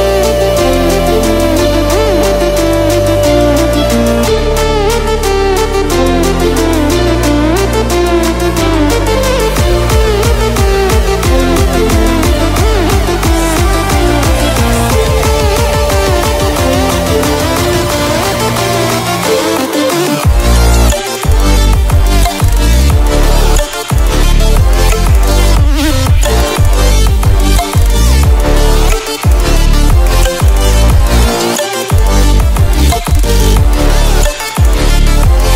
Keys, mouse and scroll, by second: 3.6 click, 6.8-7.5 scroll up 1, 8.0 click, 10.7 click, 15.4 click, 17.8 ctrl+alt+scroll up 1, 20.1 click, 22.7 click, 29.2 ctrl+alt+scroll down 1, 29.9 click, 30.4 ctrl+alt+scroll down 1, 31.0 ctrl+alt+scroll up 1, 34.8-35.1 drag.